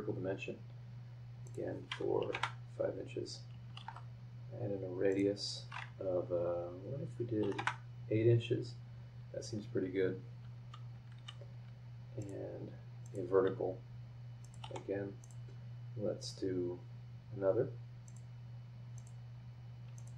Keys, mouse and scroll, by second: 1.4 click, 2.2 KP_5, 2.3 KP_Enter, 3.8 shift+r, 5.1 click, 7.4 KP_8, 7.6 KP_Enter, 11.1 Escape, 12.2 click, 13.0 click, 14.4 click, 14.6 v, 15.2 click, 16.2 click, 18.0 click, 18.9 click, 19.9 click.